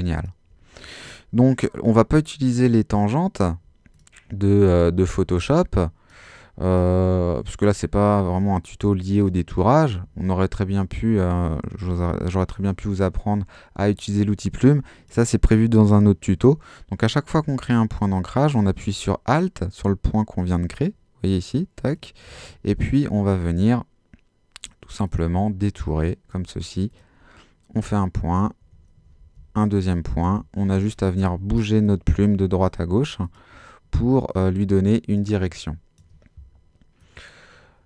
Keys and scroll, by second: 29.2 alt+super+z, 29.8 super+z, 35.4 space.